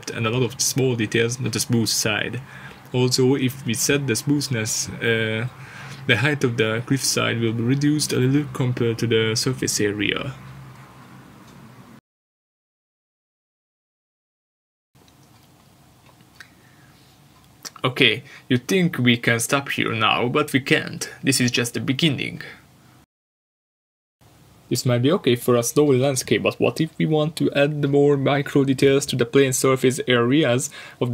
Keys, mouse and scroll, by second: 1.2 click, 9.7 click, 15.8 click, 16.7-17.9 scroll down 1.